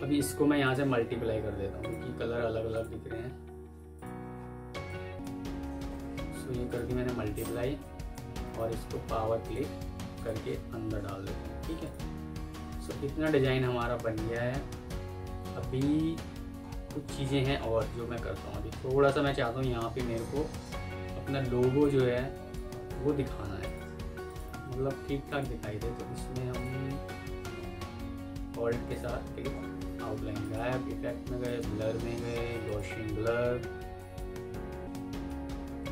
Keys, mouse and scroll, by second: 4.2 alt+scroll up 1, 5.6 ctrl+z, 8.3 right click, 11.2 F4, 12.3 F2, 15.2 alt+scroll down 1, 16.5 alt+scroll up 1, 16.9 alt+scroll down 1, 17.2 alt+scroll up 1, 21.7 ctrl+click, 24.4 c, 24.8 Escape, 28.8 alt+click.